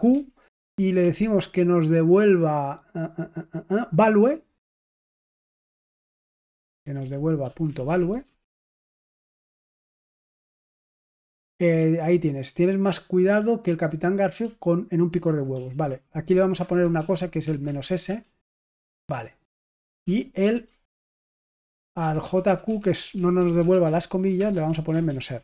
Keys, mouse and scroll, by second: 0.0-0.9 typing, 4.6-9.2 typing, 15.5 ctrl+p, 15.8 ctrl+a, 16.9 alt+f, 17.3-18.3 typing, 20.0 ctrl+p, 20.9 ctrl+a, 21.7 alt+f, 21.9 alt+f, 22.2 alt+f, 22.4 alt+f, 22.6 alt+f, 22.9 alt+f, 23.1 alt+f, 23.3 alt+f, 23.6 alt+f, 23.8 alt+f, 24.2-25.2 typing.